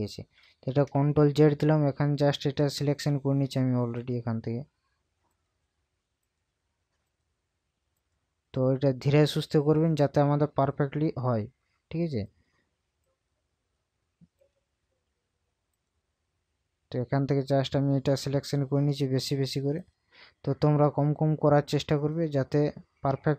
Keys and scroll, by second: 0.4 ctrl+d.